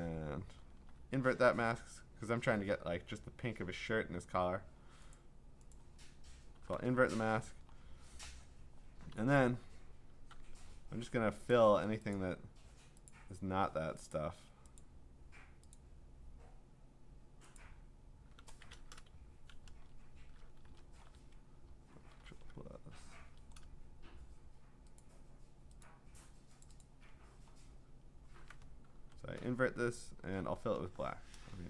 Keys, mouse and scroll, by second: 5.1 click, 5.7 click, 6.6 ctrl+i, 7.7-9.1 scroll, 9.1 m, 10.3 l, 11.5 click, 12.1 click, 13.1 click, 14.1 click, 14.8 click, 15.7 click, 17.6 click, 19.7 BackSpace, 20.7-21.3 alt+scroll, 22.0 ctrl+=, 22.2 ctrl+=, 22.3 ctrl+=, 25.0 click, 25.8 click, 26.8 click, 27.5-28.4 scroll, 28.9 ctrl+shift+i, 30.6 alt+BackSpace, 31.3 ctrl+BackSpace.